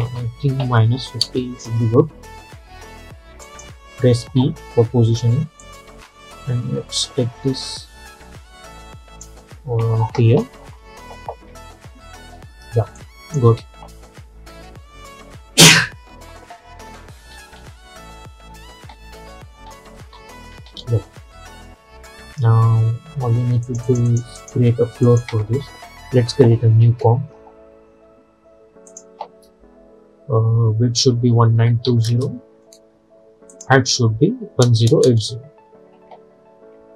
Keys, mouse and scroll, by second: 0.7 -, 1.7 Return, 3.5 click, 4.3 p, 5.7-10.8 drag, 10.8 Down, 13.1 click, 13.5 space, 17.3 space, 23.7 click, 26.9 ctrl+n, 29.0 click, 33.6 click.